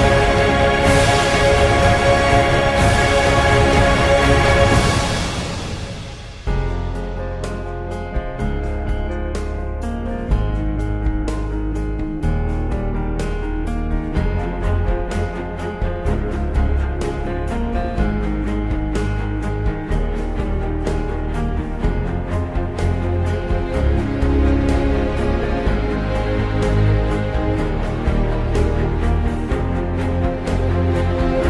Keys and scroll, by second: 2.5-3.8 typing, 5.9 ctrl+Page_Down, 7.1 F2, 7.9 ctrl+v, 10.6-11.5 typing, 11.5 Tab, 14.3-15.6 typing, 15.8 Return, 17.7 ctrl+Page_Down, 21.5 Down, 22.1 Right, 26.3-27.8 typing.